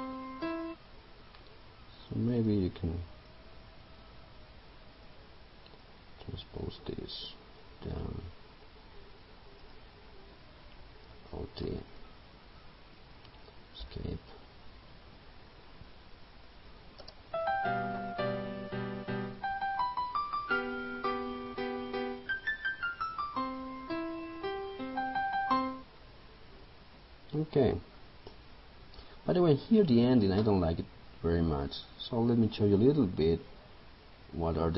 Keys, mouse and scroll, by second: 0.5-9.0 drag, 9.6 right click, 11.7 alt+d, 13.9 Escape, 16.6 click, 17.1 space, 28.2 click.